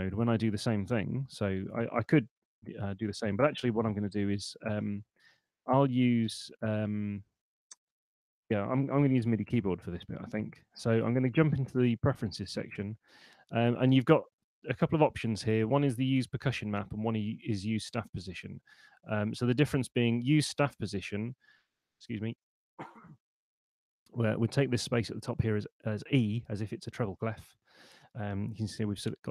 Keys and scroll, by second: 1.3 Up, 2.3 Down, 4.9 /, 7.1 /, 9.1 super+,.